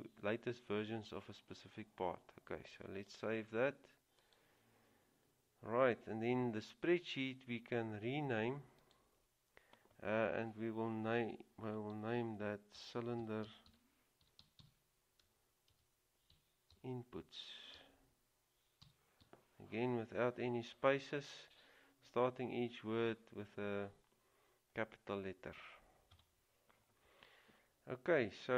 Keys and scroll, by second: 12.2-16.9 typing, 17.9 typing, 19.0-19.4 typing, 26.3 Return.